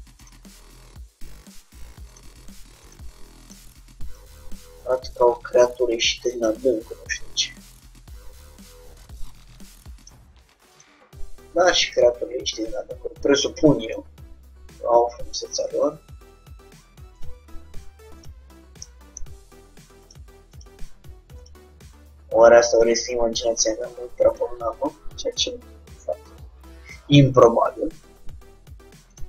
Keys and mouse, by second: 1.4-5.5 drag, 1.4 g, 4.9-9.1 middle drag, 5.6 g, 10.8-12.5 drag, 11.7 g, 13.9-15.6 drag, 14.3 g, 17.3-18.9 drag, 20.1-27.1 drag, 21.9 g, 25.6 g.